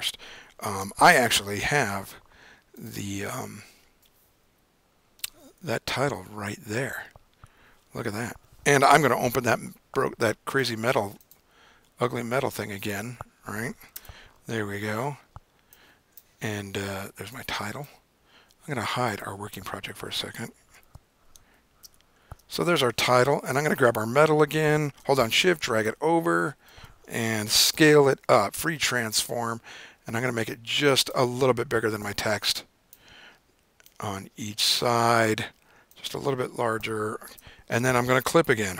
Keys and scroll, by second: 1.0 super+o, 1.5 super+o, 4.4 Down, 6.0 Return, 9.2 super+o, 21.2 super+0, 21.9 super+-, 22.2 super+-, 27.6 super+t.